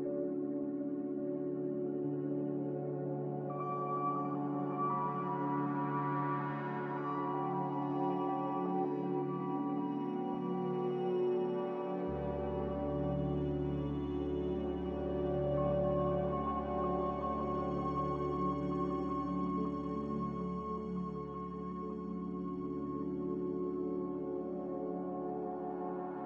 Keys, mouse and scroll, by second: 7.3 z, 12.8 Delete, 14.0 click, 22.3 click, 24.9-25.8 typing.